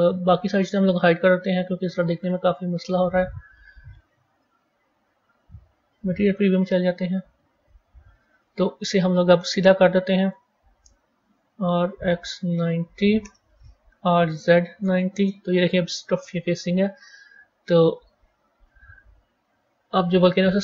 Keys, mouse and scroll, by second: 0.7-1.7 scroll up 3, 1.7 click, 2.1 click, 2.6 click, 3.0 click, 4.7 z, 7.1-7.7 scroll up 4, 7.7-9.6 scroll up 4, 10.1 click, 11.2 r, 19.9 click.